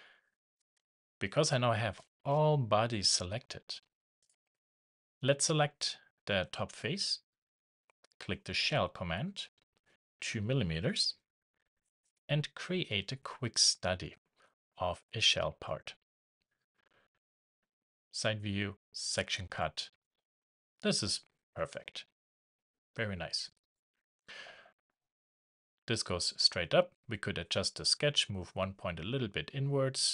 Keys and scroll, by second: 11.0 shift+Return.